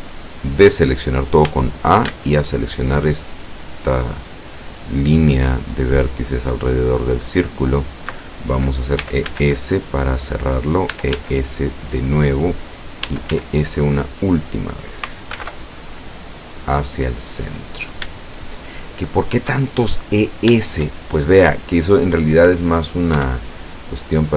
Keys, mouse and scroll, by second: 1.0 scroll down 1, 1.5 a, 7.0 alt+shift+right click, 9.1 e, 9.3 s, 10.6 click, 11.0 e, 11.2 s, 12.3 click, 13.1 e, 13.4 s, 14.6 click, 15.4 alt+m, 16.2 click, 17.2 scroll up 2, 17.9 scroll down 2, 18.9 shift+middle click, 19.9 shift+middle click, 23.3 KP_5.